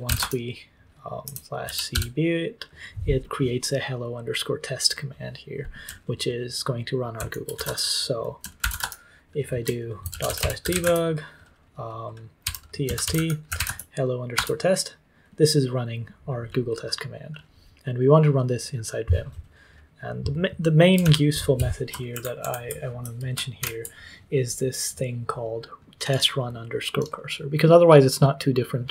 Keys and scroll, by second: 0.0-2.6 typing, 6.9-8.6 typing, 8.7 Return, 9.8-14.1 typing, 14.3 Return, 21.0 super+l, 22.1 ctrl+Page_Up, 22.4 ctrl+Page_Up, 23.5 ctrl+Page_Down.